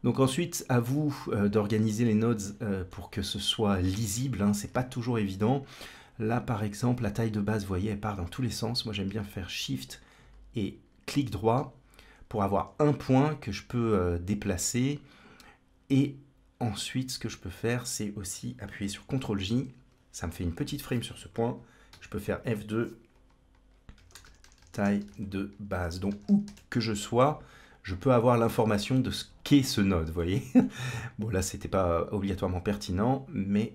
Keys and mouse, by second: 0.0-1.3 drag, 1.9 middle click, 12.3 g, 19.2 ctrl+j, 21.7 F2, 24.4 l, 30.0 middle click, 32.8 g.